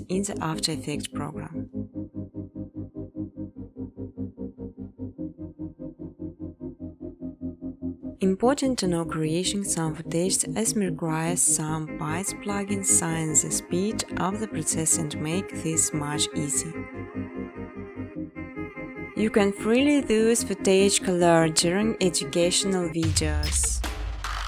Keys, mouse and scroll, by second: 0.6 click, 2.5-9.5 typing, 11.0 right click, 11.5 click, 12.1 ctrl+c, 13.0 click, 13.2 ctrl+v, 13.3 typing, 14.0 click, 14.2 click, 18.6 click, 19.0-20.1 typing, 23.5 Tab, 23.8-24.4 typing.